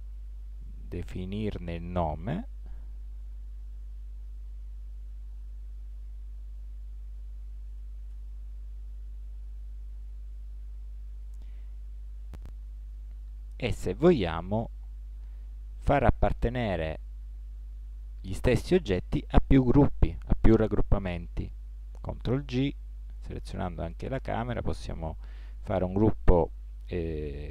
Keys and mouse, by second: 15.8-17.6 right drag, 22.5 ctrl+g.